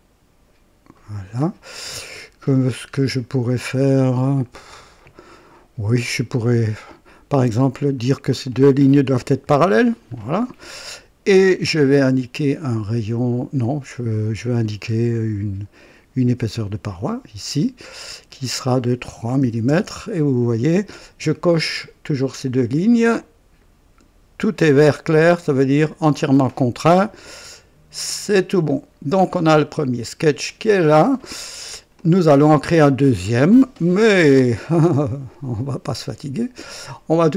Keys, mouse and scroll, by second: 0.9 right click, 1.4-1.8 scroll down 1, 1.9 right click, 2.9 scroll up 1, 3.4 scroll down 1, 4.0-4.7 right drag, 7.2 click, 7.4 typing, 7.9 click, 9.4 typing, 12.1 click, 13.6 click, 14.8-15.1 scroll up 1, 16.6 click, 18.2 click, 19.4 typing, 19.6 Return, 20.5-20.8 scroll down 1, 23.1 right click, 24.6 right click, 28.2 click, 29.2 scroll down 1, 30.4 click, 31.4-31.8 scroll down 1, 31.9-33.2 drag.